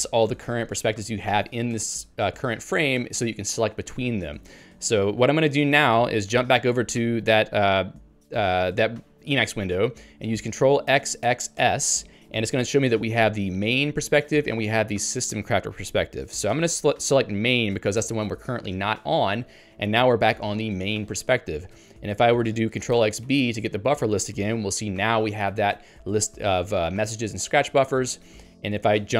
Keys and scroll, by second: 6.4 ctrl+g, 14.2 ctrl+j, 16.6 ctrl+k, 18.0 Return, 28.8 ctrl+g.